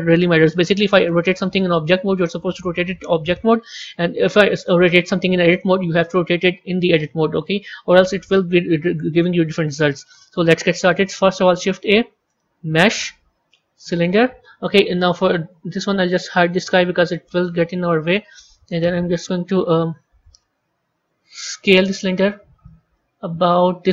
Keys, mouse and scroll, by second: 4.5 click, 9.9-11.3 middle drag, 11.3 shift+a, 15.4-16.5 scroll down 2, 16.5 click, 17.3-19.6 middle drag, 19.6 KP_1, 20.0 KP_3, 21.5 s.